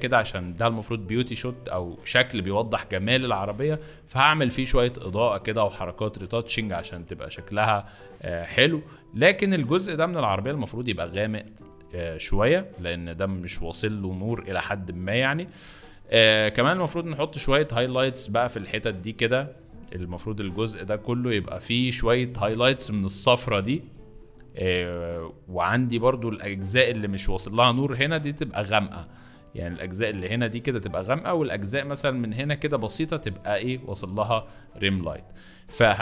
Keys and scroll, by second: 35.0 Escape.